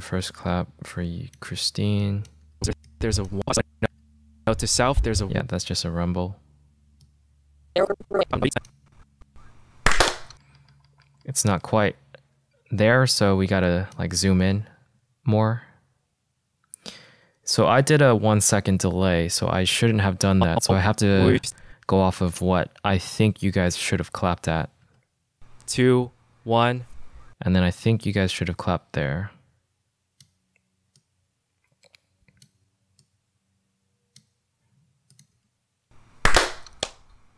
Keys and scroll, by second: 2.9 space, 9.3 space, 10.7 =, 15.1 =, 25.4 space, 35.9 space.